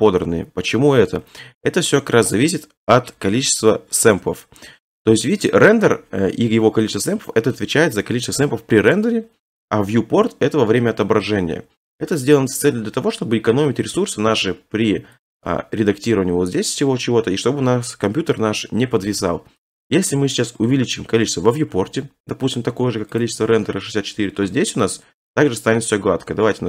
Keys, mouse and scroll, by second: 3.5 middle click, 3.5 middle click, 4.3 middle click, 7.4 middle click, 7.4 middle click, 10.1 middle click, 10.2 middle click, 12.0 middle click, 12.2 middle click, 12.3 scroll, 15.3 click, 16.4-17.1 scroll, 17.1-18.0 scroll, 23.2 click, 24.2 typing.